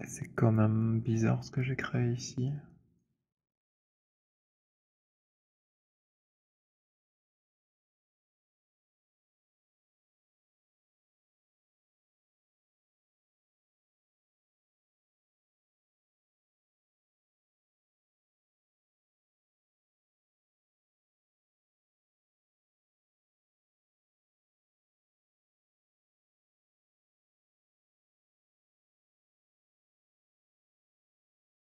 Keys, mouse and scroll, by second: 0.2 alt+right click, 0.4 alt+click, 1.1 alt+middle click, 1.5 alt+right click, 2.2 alt+click, 2.4 alt+middle click, 2.8 alt+right click, 3.7 alt+middle click, 4.7 alt+click, 5.8 alt+click, 6.8 click, 8.0 middle click, 8.2-9.8 scroll, 12.8 ctrl+h, 14.1-15.0 alt+scroll, 15.2 click, 16.0 shift+click, 16.3 alt+middle click, 19.2 right click, 21.4 click, 25.5 click, 27.1 click, 27.6 z, 29.0 click, 31.3 click.